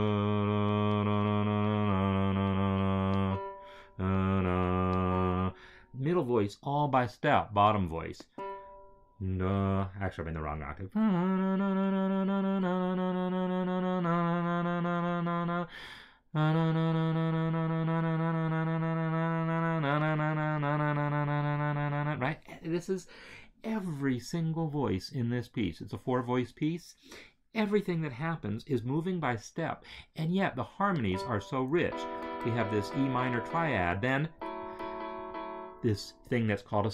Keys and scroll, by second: 31.7 Right, 33.1 Right, 34.3 Right, 34.9 Right.